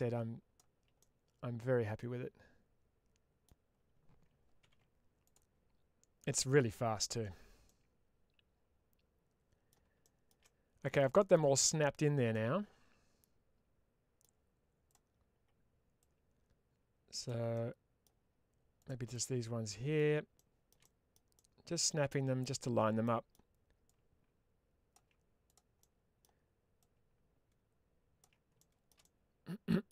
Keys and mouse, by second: 0.9-3.3 middle drag, 4.5 ctrl+s, 9.3 middle click, 9.9 shift+middle click, 10.3 middle click, 11.0 shift+middle click, 12.2-14.1 middle drag, 14.7 click, 15.9-17.2 ctrl+drag, 17.4 middle click, 18.7 click, 19.0 middle click, 20.2 shift+middle click, 21.2-22.3 middle drag, 22.9 middle click, 23.8-24.8 ctrl+drag, 25.4 click, 25.7 middle click, 26.7-28.1 ctrl+drag, 28.9 middle click.